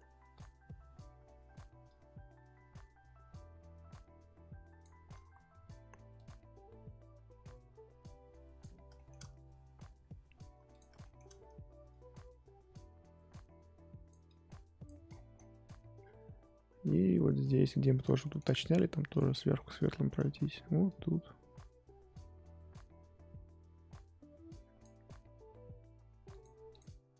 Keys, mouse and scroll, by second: 0.4 click, 1.8-5.2 drag, 5.2 ctrl+z, 6.1-8.9 drag, 8.9-10.7 shift+middle drag, 10.7 click, 11.0 shift+middle click, 11.9-15.1 drag, 15.1-16.0 scroll down 11, 16.0-18.2 scroll up 6, 18.2 shift+middle click, 18.4 scroll down 1, 18.4-19.1 scroll up 3, 19.1 click, 19.7 scroll up 1, 19.9 shift+middle click, 20.8-23.9 drag, 26.4 click, 26.8 click.